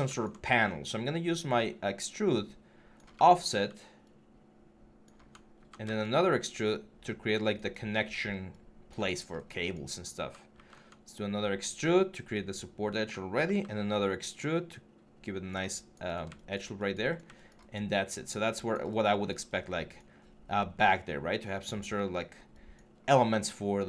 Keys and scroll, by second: 5.4 ctrl+e, 10.3 ctrl+e, 13.2 ctrl+e.